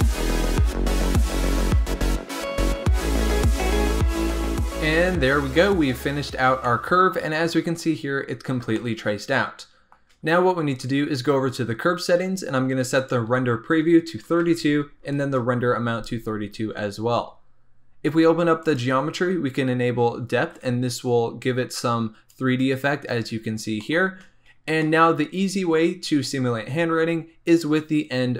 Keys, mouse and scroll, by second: 0.0-1.1 typing, 0.3 shift+middle click, 1.0 click, 2.3 click, 2.4 g, 5.2 Tab, 5.6-6.6 scroll down 8, 6.6 shift+middle click, 7.3 scroll up 2, 8.7-11.7 shift+middle drag, 12.9-15.9 drag, 18.6 click, 20.5-23.2 drag, 23.2 scroll down 2, 23.8 shift+middle click, 23.9-24.4 shift+scroll up 2, 24.7-27.4 shift+middle drag, 27.4-28.3 scroll down 6.